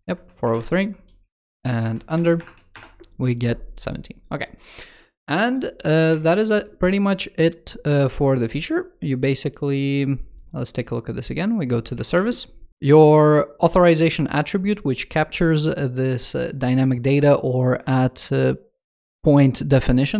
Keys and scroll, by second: 0.3 alt+BackSpace, 2.1 super+Return, 5.9 super+2, 11.7 super+2.